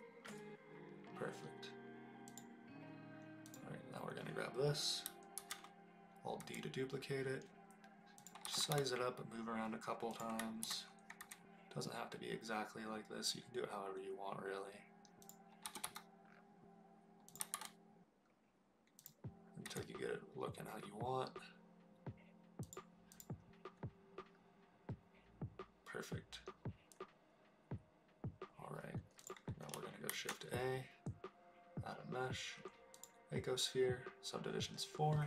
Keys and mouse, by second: 3.5 click, 5.4 alt+d, 6.4 s, 8.2 click, 8.7 g, 8.7 y, 10.1 click, 10.6 alt+d, 11.2 s, 15.2 click, 15.6 g, 15.8 y, 17.3 click, 17.4 g, 17.5 z, 19.0 click, 19.6 s, 22.6 click, 23.2 click, 30.1 shift+a.